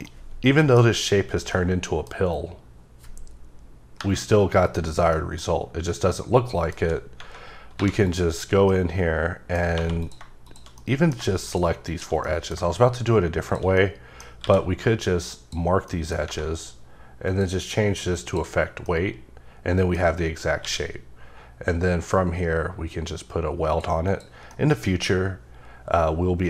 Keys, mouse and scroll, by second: 0.0 middle click, 1.5 middle click, 4.0 KP_Divide, 5.1 middle click, 5.5-5.8 scroll up 3, 5.8 scroll down 3, 6.1 middle click, 7.8 3, 8.0 click, 8.3 scroll down 2, 8.7 middle click, 9.7 2, 10.0 click, 11.1 shift+middle click, 11.5 shift+click, 11.9 shift+double click, 12.2 middle click, 13.4 shift+click, 13.7 middle click, 14.4 q, 15.2 click, 15.9 middle click, 17.3 click, 18.1 click, 18.8 middle click, 20.0 scroll up 1, 20.6 q, 23.7 click, 24.0 click, 24.5 middle click, 25.0 scroll up 2.